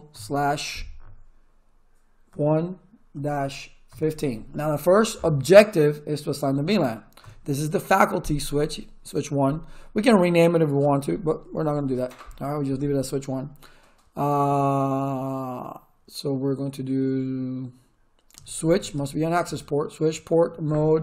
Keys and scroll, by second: 0.0-0.1 typing, 2.3-4.6 typing, 7.2 Return, 18.1-19.2 typing, 20.4 m, 20.6 Tab.